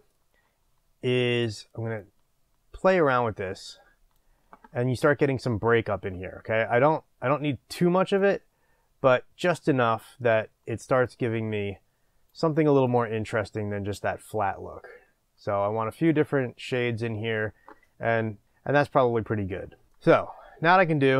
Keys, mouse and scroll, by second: 2.2-21.1 drag.